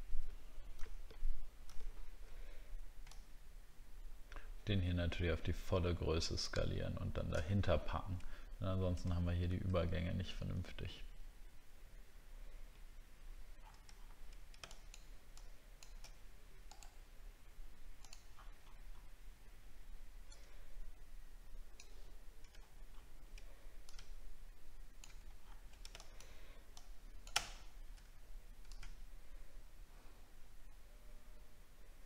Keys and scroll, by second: 7.6 alt+scroll up 1, 22.5-23.0 alt+scroll up 1, 26.0 alt+scroll down 1.